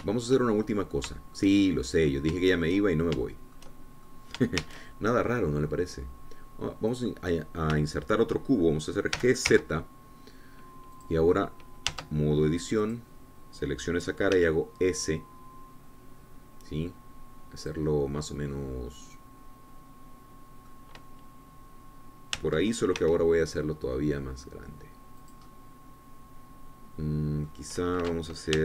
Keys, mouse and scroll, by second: 1.2-1.5 scroll down 2, 1.6-3.6 shift+middle drag, 3.6-3.9 shift+scroll up 2, 3.9-5.9 shift+middle drag, 6.1 shift+a, 8.5 click, 9.3-10.3 shift+middle drag, 10.7 g, 11.0 z, 12.5 click, 13.5 Tab, 14.4-15.9 drag, 15.9 s, 19.2-22.4 drag, 19.5-22.4 right drag, 23.9 Tab, 24.6 s, 26.8-28.6 drag.